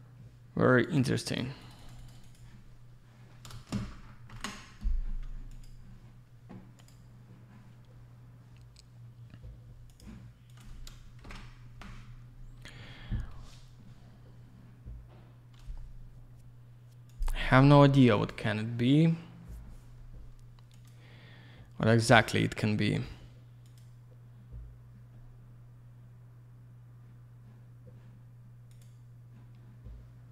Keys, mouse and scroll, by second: 0.8 click, 1.3 click, 1.4 double click, 1.6 click, 1.7 click, 1.8 click, 1.9 double click, 2.0 click, 2.1 click, 2.2 click, 2.3 double click, 4.3 ctrl+Escape, 5.5 click, 5.6 click, 6.8 click, 6.9 click, 10.2 click, 10.5 click, 10.6 click, 11.2 ctrl+shift+Escape.